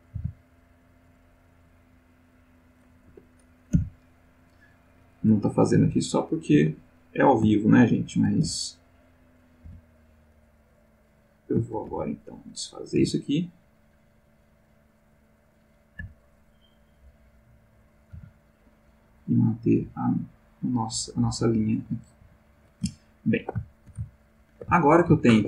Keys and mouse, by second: 0.1 t, 2.0 right click, 3.0 Escape, 5.5 click, 5.8 g, 6.5 Escape, 7.0 click, 7.5 shift+click, 7.9 shift+click, 8.4 shift+x, 8.7 shift+click, 9.3 click, 9.6 x, 9.8 click, 11.0 click, 11.6 shift+click, 11.9 shift+x, 12.0 shift+click, 12.5 shift+click, 12.9 shift+g, 14.3 click, 15.4 click, 16.0 x, 17.0 click, 18.0 click, 18.2 g, 19.1 click, 19.7 click, 19.8 g, 20.6 click, 21.1 click, 21.1 g, 21.6 click, 22.1 click, 22.2 g, 22.6 click, 23.0 ctrl+middle click, 23.8-25.1 ctrl+shift+middle drag.